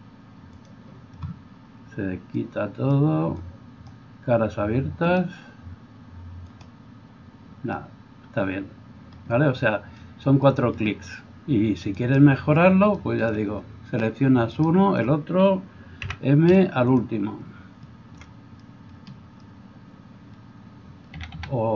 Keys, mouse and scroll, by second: 5.1-6.5 middle drag, 6.5-21.7 drag, 12.0 right click, 14.6 shift+right click, 16.0 m, 21.1 a, 21.4 a.